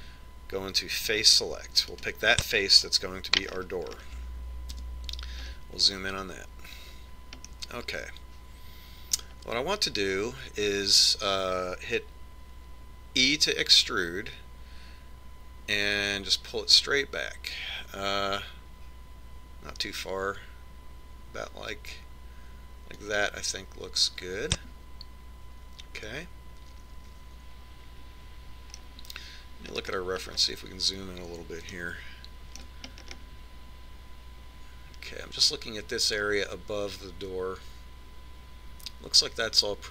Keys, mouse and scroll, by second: 3.3 right click, 4.8-6.2 middle drag, 6.2 KP_Decimal, 7.1-8.5 middle drag, 9.8 middle click, 11.6-12.5 scroll down 1, 12.5 scroll down 1, 14.7 e, 26.1-27.8 middle drag, 31.3-36.5 middle drag.